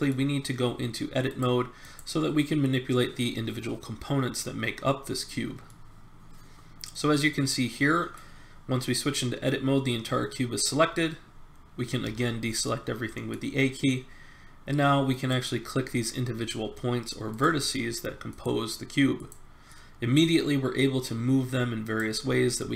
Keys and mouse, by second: 5.6-7.6 middle drag, 12.0 a, 15.1 right click, 19.7-21.2 middle drag, 21.2 right click, 22.3 middle click.